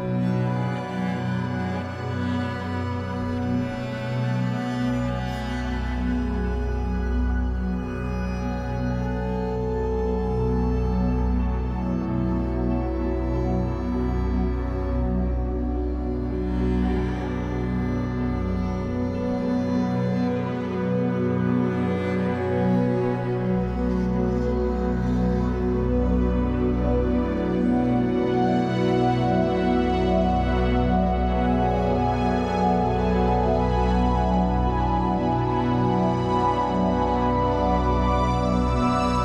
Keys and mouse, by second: 1.4-2.3 typing, 2.3 Escape, 3.4 e, 4.2 Return, 5.8 ctrl+z, 6.8 s, 7.3 Escape, 8.5 e, 8.9 Return, 9.8 s, 10.4 s, 14.0 click, 14.8 alt+click, 15.8-18.5 alt+drag, 18.6 click, 19.3 click, 20.3 click, 21.4 space, 23.7 /, 29.2 click, 30.6-35.8 drag, 36.4 click, 38.7-39.2 drag.